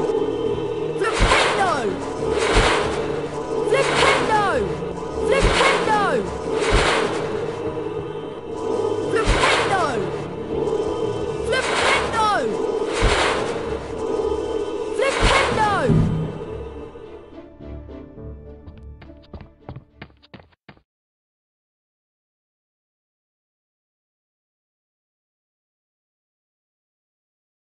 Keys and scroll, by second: 0.0-1.4 typing, 4.0-5.1 typing, 6.8 typing, 7.8-8.6 typing, 13.8 typing, 15.5-21.2 typing.